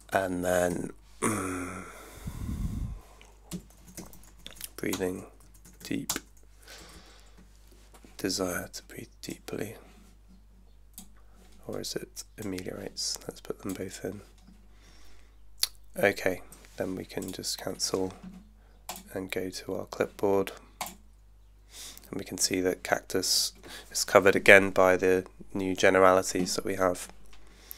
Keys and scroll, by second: 0.7 Left, 3.3-5.7 typing, 6.1 Return, 6.8 Down, 8.6 Down.